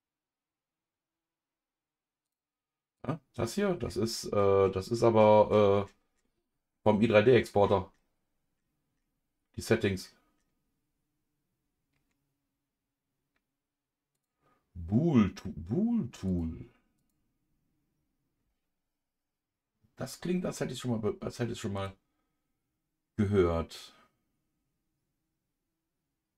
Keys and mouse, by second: 3.0 click, 14.1 click, 16.3 click, 17.0-20.5 drag, 21.7-26.3 drag.